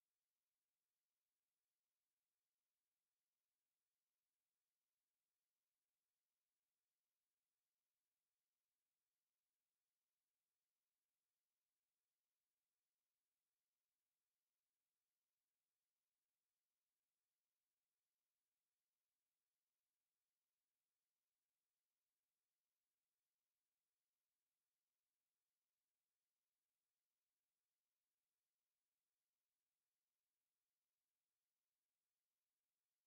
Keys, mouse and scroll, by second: 0.1 click, 1.9 click, 3.6 click, 7.1 click, 7.9 click, 9.9 click, 11.3 click, 13.1 click, 16.1 click, 17.1 click, 17.7 right click, 18.9 right click, 20.3 click, 22.5 click, 23.9 KP_2, 24.1 KP_Decimal, 24.3 KP_5, 24.6 KP_Enter, 29.9 click, 32.0 click.